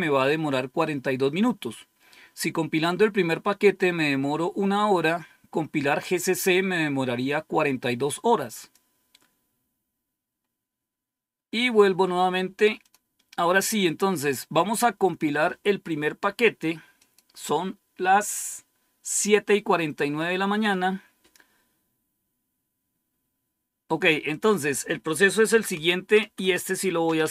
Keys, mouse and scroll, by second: 8.4 click, 10.2-11.3 scroll down 2, 11.3-12.0 scroll down 1, 12.7 click, 14.8-15.2 scroll down 1, 16.9 click, 24.2 click, 25.1-27.3 typing.